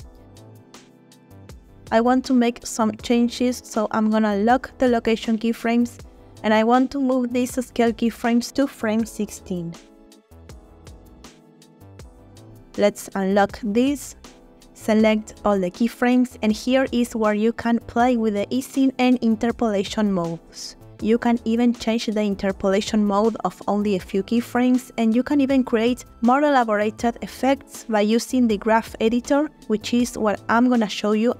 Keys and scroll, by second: 0.0 space, 8.8 g, 11.0 space, 12.6 space, 14.6 a, 18.4 space, 21.9 space, 24.5 space, 27.7 space, 31.0 space.